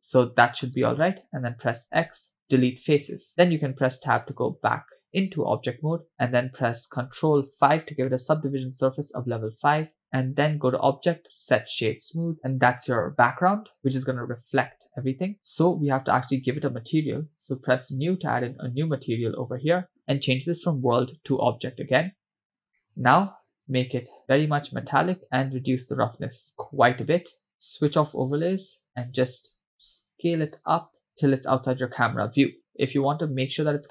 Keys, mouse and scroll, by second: 2.5 x, 4.2 Tab, 8.8 ctrl+5, 10.7-12.4 drag, 14.6-15.2 scroll up 3, 15.4 scroll down 2, 15.4 click, 17.7-18.9 drag, 20.3-21.5 drag, 22.7 scroll down 2, 22.8 middle click, 23.8 click, 25.3-27.5 drag, 27.5-27.9 scroll down 2, 29.0 click, 29.7 s, 31.6-32.7 scroll down 2, 33.1-33.9 scroll up 2.